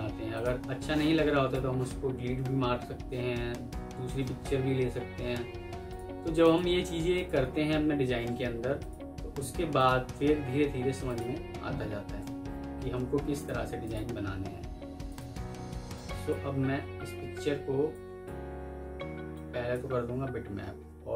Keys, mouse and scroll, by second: 5.2 ctrl+u, 8.1 Delete, 9.1 Delete, 12.4 Delete, 12.7 ctrl+u, 13.7 double click, 14.7 Delete, 15.2 Delete, 21.0 alt+b.